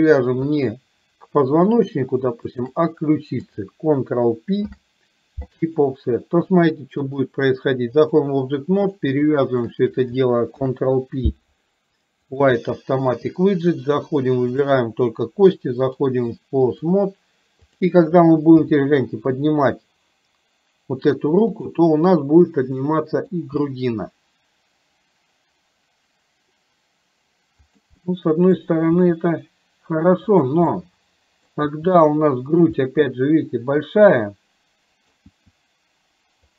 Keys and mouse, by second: 0.7 click, 4.7 ctrl+p, 7.2-8.3 drag, 8.9 click, 9.6 shift+click, 10.7 ctrl+p, 15.9-16.9 drag, 18.7 g, 22.9 middle click, 23.7 g, 28.2 middle click, 29.1 g, 30.8-31.7 middle drag, 31.8 g, 32.9-35.3 middle drag, 35.4 g.